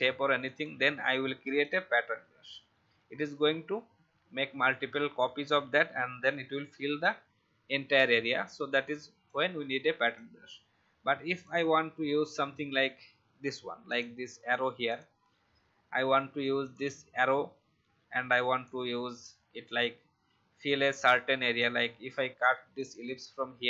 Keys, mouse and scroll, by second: 15.9 ctrl+c, 16.7 click, 17.1 ctrl+v, 18.6-23.6 drag.